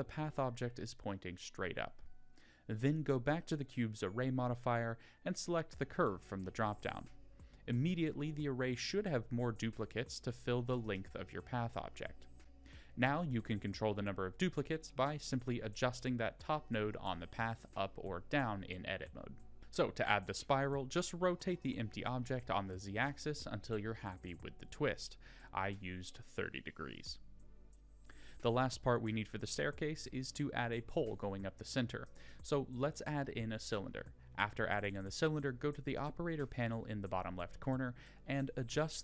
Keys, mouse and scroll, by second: 2.8 middle click, 3.3-4.3 drag, 10.1 click, 11.6 Tab, 12.2 click, 12.9 g, 21.1-21.5 scroll down 1, 21.7 middle click, 22.5 Tab, 23.0 click, 23.7 middle click, 24.3-24.6 middle drag, 25.3 r, 27.8 shift+a, 32.9 click, 37.2-38.9 drag.